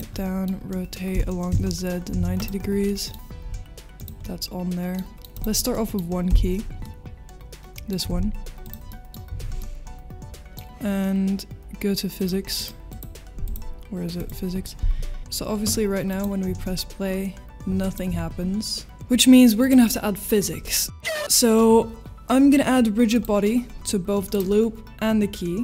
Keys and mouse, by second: 0.1 middle click, 0.7 middle click, 2.1 9, 2.1 0, 2.3 click, 2.8 middle click, 3.4 g, 4.0 click, 4.2 middle click, 5.1 middle click, 5.3 middle click, 5.7 middle click, 5.9 h, 6.8-7.9 middle drag, 8.1 ctrl+s, 8.6 click, 8.9 middle click, 9.6 middle click, 12.2 click, 12.5 click, 12.9 click, 13.4 click, 15.2 space, 19.6 click, 19.6 space, 23.1 click, 24.3 click.